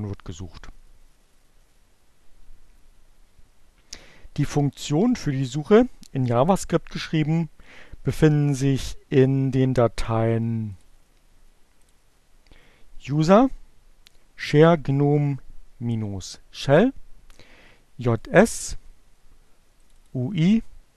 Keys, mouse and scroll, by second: 11.3 click, 12.6 click, 17.0-18.4 drag, 19.4-20.9 drag.